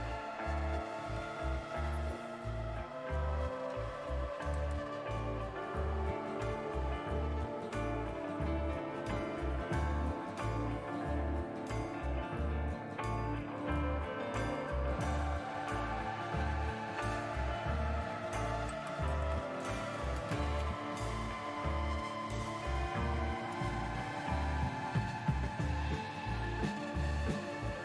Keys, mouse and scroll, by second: 21.0 Return, 21.0 typing, 22.1-23.3 typing, 23.4 Return.